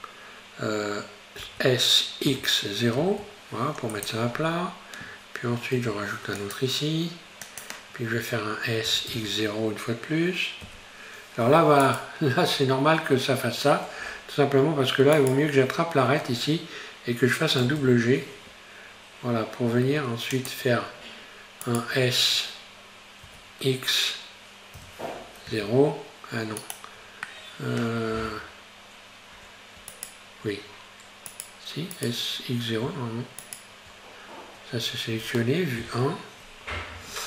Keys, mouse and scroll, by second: 1.5 s, 5.8 ctrl+r, 8.9 s, 12.7-13.0 scroll up 1, 15.2 right click, 17.7 g, 21.7 shift+right click, 23.3 s, 27.3 middle click, 28.2 scroll up 3, 29.9 shift+right click, 31.4 right click, 32.0 right click, 33.5 shift+right click, 34.9-35.8 scroll down 2, 35.8 KP_1.